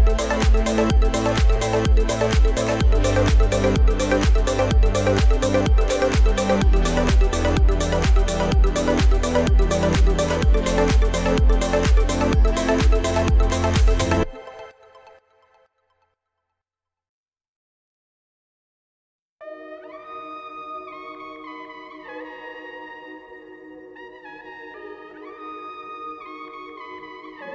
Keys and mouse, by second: 0.4 Return, 3.1 KP_Subtract, 3.7 KP_Subtract, 6.4 KP_Subtract, 6.4 KP_5, 9.2 KP_5, 11.6-17.0 typing, 19.0 KP_Add, 19.2 KP_Add, 19.4 KP_Add, 19.6 KP_Add, 19.8 KP_Add, 20.0 KP_Add, 22.7 right click, 25.1 KP_8.